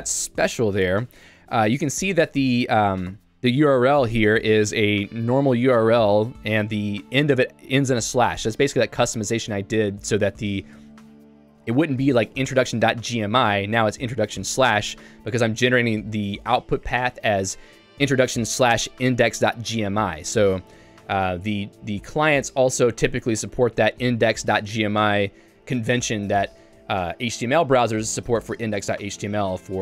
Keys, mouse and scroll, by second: 0.1-1.6 ctrl+u, 3.2 o.